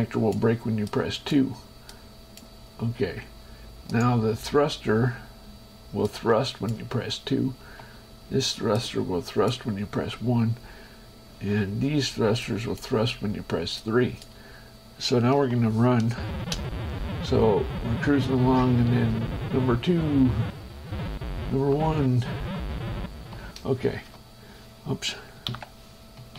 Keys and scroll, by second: 7.8 1, 11.6 3, 16.6 space, 16.8 3, 19.3 2, 20.5 3, 21.7 1, 23.0 2, 24.1 shift+Escape, 25.8 ctrl+m.